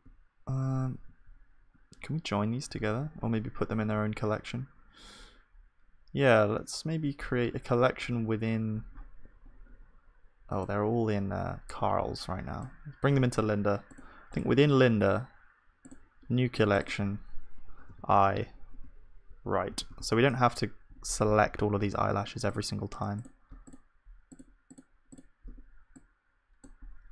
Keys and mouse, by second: 2.0 middle click, 3.2-8.5 drag, 3.2-8.5 middle drag, 3.2-8.5 right drag, 19.2-27.1 right drag.